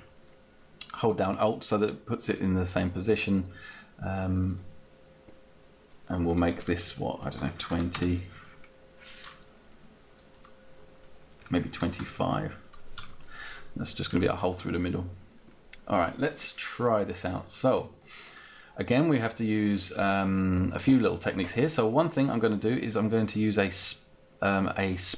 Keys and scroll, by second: 7.4 2, 7.8 0, 7.9 Return, 8.5 Return, 11.5 Up.